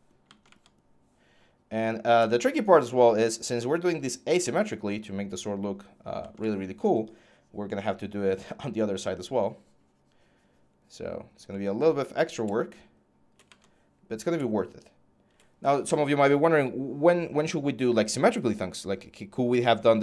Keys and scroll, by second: 2.6 scroll.